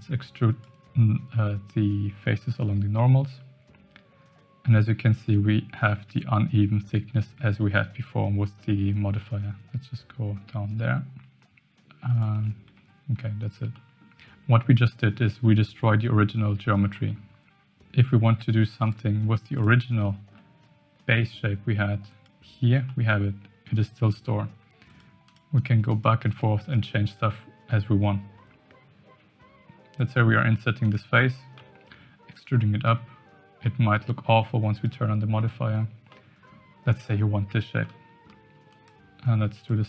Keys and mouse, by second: 12.7 Tab, 13.8 middle drag, 16.9 middle click, 18.8 click, 19.5 click, 20.0-20.3 shift+middle drag, 22.1 click, 22.9-23.6 middle drag, 24.9 click, 25.2 click, 25.5 click, 25.8 click, 26.3 click, 26.6 click, 27.0 click, 29.3 Tab, 29.3 i, 31.6 e, 32.8 Tab, 34.7 click, 36.1-36.5 middle drag, 37.8-38.3 middle drag, 38.6 click, 39.2 Tab, 39.5 click.